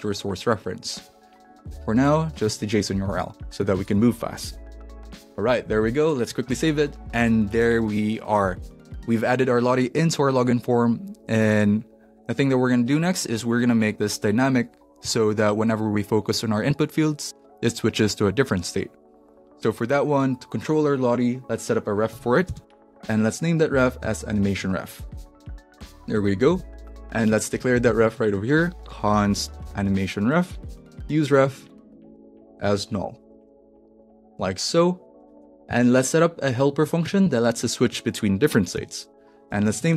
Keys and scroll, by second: 3.0 Up, 3.4 Left, 4.4 Right, 4.9 super+v, 6.4 super+s, 22.4-25.7 typing, 25.8 alt+shift+Left, 26.2 super+c, 27.5 Return, 27.5-35.4 typing, 29.6 super+v, 34.7 Right, 35.6 super+s, 37.0 Return, 37.5 Return, 38.5-39.9 typing.